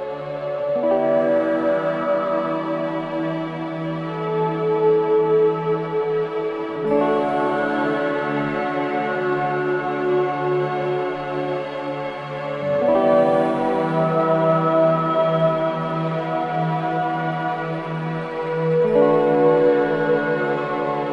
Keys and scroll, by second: 1.9 ], 6.5 ], 7.9 4, 9.9 3, 10.2 ], 11.6 4, 18.0 ], 20.2 ].